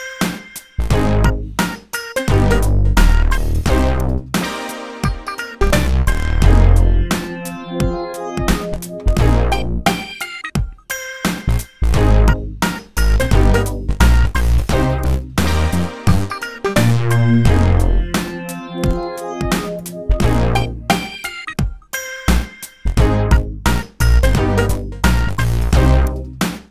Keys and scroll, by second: 19.7 BackSpace.